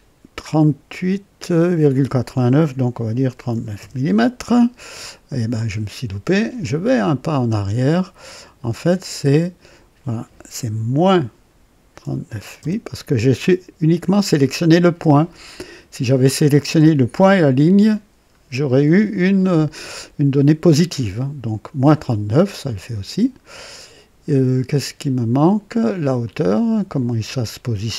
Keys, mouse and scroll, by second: 3.2 KP_3, 3.5 KP_9, 3.7 KP_Enter, 6.8 click, 8.9 click, 10.9 KP_Subtract, 12.0 KP_3, 12.2 KP_9, 12.5 KP_Enter, 19.5 right click, 22.6 click, 26.2 click.